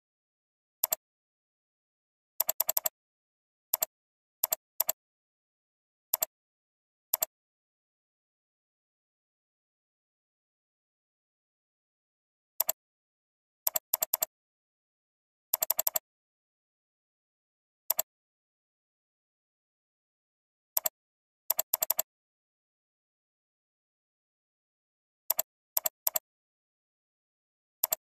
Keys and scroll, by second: 12.5 ctrl+space, 14.7 alt+space, 20.6 ctrl+space, 24.4 alt+space.